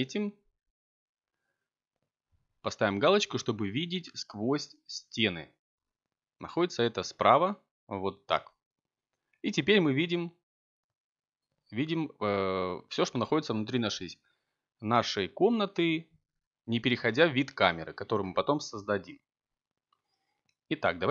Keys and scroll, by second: 20.0 ctrl+t.